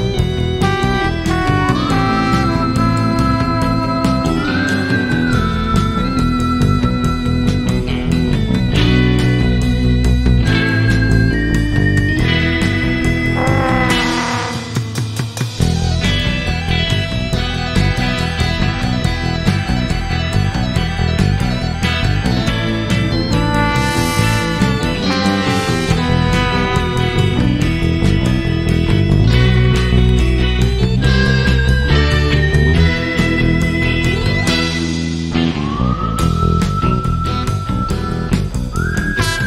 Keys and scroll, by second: 16.5 shift+Left, 19.0 alt+a, 21.4 shift+space, 37.8 shift+space.